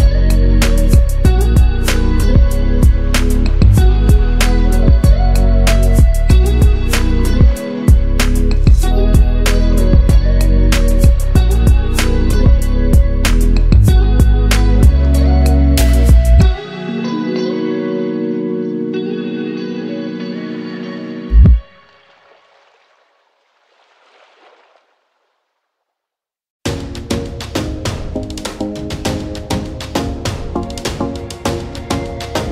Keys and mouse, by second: 9.4 middle click, 10.6 click, 11.5-21.1 drag, 21.5 middle click, 22.5 middle click, 23.3-25.8 drag.